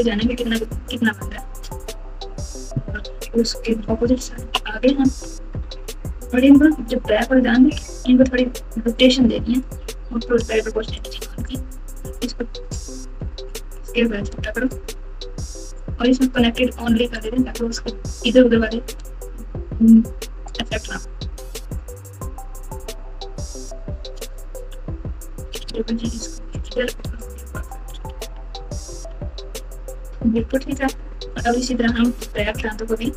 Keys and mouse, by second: 2.9 KP_9, 4.0 ctrl+KP_2, 4.6-5.2 ctrl+KP_4, 5.5 KP_Add, 5.7 KP_Add, 7.7 alt+z, 10.4 o, 10.9 click, 11.1 click, 12.0 g, 17.1-18.5 drag, 19.3 g, 24.2 Tab, 24.7 Tab, 25.5 g, 27.0 Tab, 27.8-29.6 typing, 30.5 alt+z, 31.2-33.1 typing.